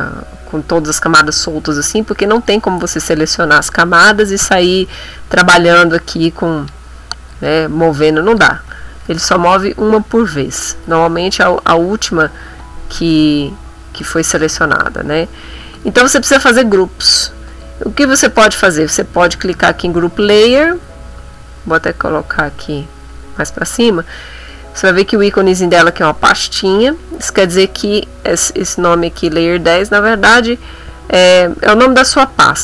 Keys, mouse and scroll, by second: 2.3 click, 3.3 shift+click, 6.6 click, 7.3-8.5 drag, 9.1 ctrl+z, 10.9 ctrl+shift+a, 14.0 ctrl+click, 15.7 click, 17.5 click, 18.7 click, 19.7 click, 21.2 click, 22.2 click, 23.1 click, 28.2 click, 32.5-32.6 typing.